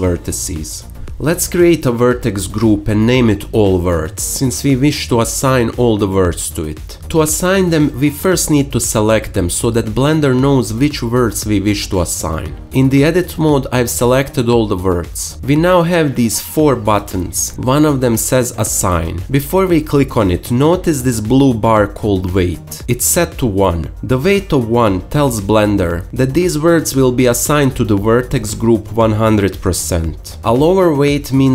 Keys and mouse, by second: 2.6-3.4 drag, 3.5-5.0 drag, 5.0 l, 5.5 shift+click, 7.3-13.2 shift+drag, 13.2 Tab, 13.5-14.7 alt+shift+drag, 14.7 a, 14.9-19.3 alt+shift+drag.